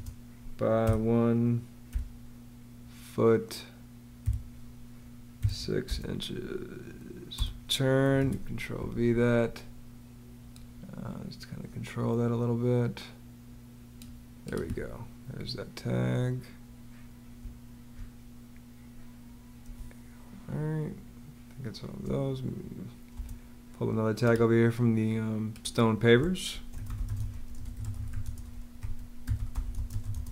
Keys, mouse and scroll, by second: 0.0-0.7 typing, 1.8 ', 2.8 click, 4.1 space, 5.2 6, 5.7 click, 6.4 ', 7.2 Return, 8.0 super+v, 8.3 super+v, 17.2 space, 19.6 space, 23.0 space, 26.4-30.3 typing.